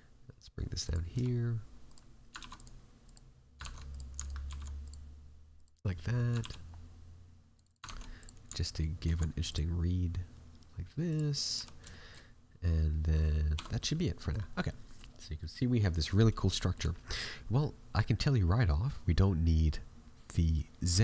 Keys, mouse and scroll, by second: 1.1 s, 2.4 ctrl+r, 3.5 ctrl+Tab, 4.1 alt+right click, 4.4 alt+e, 6.3 ctrl+r, 7.8 ctrl+Tab, 8.6 alt+right click, 8.9 alt+e, 11.5 a, 11.8 shift+middle click, 13.5 Tab, 13.7 middle click, 14.3 scroll down 3, 14.6 middle click, 15.0 scroll down 1, 15.3 middle click, 15.7 scroll up 2, 16.4 scroll up 3, 16.5 shift+middle click.